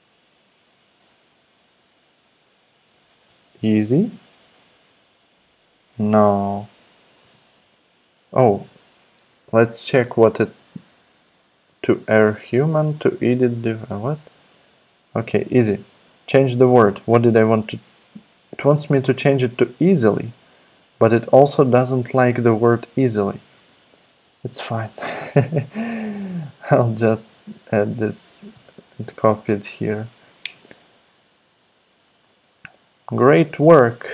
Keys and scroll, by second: 2.8 BackSpace, 2.9 BackSpace, 3.1 BackSpace, 3.3 y, 6.1 BackSpace, 7.2 y, 12.8 space, 13.8 BackSpace, 26.3 super+c, 27.1 super+Tab, 28.5 super+v.